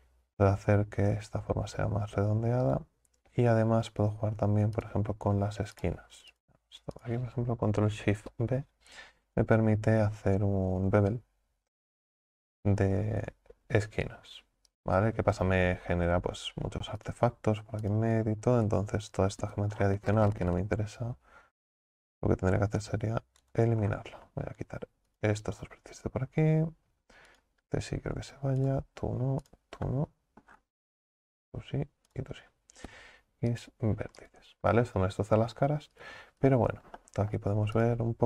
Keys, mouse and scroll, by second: 4.8 shift+right click, 5.8-7.1 right drag, 17.0 right click, 17.8 ctrl+right click, 18.9 scroll down 2, 23.9-25.1 scroll up 6, 25.1 alt+shift+right click, 27.3 shift+right click, 28.6 shift+right click, 29.5 shift+right click, 29.9 shift+middle click, 30.5-31.4 scroll down 3, 31.4 shift+right click, 32.1 shift+right click, 34.8 scroll down 7, 35.5-36.0 scroll up 2, 36.0 right click, 36.4 alt+shift+right click, 37.0 shift+middle click, 37.3-37.8 scroll down 1, 37.8 right click.